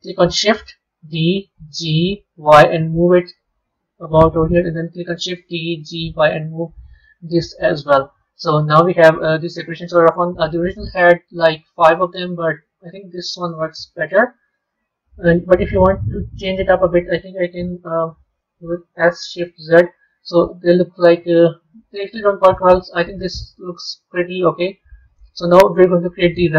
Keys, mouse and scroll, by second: 1.0 shift+d, 5.3 shift+d, 8.7-10.9 middle drag, 15.3 middle click, 16.2 click, 18.9 s, 22.9-25.0 middle drag, 25.0 a.